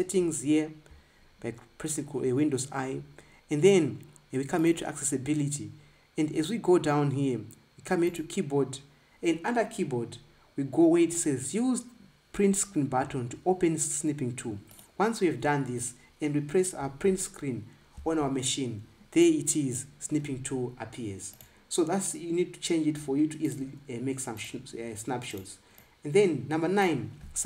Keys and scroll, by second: 0.3 super+i, 17.6 Print.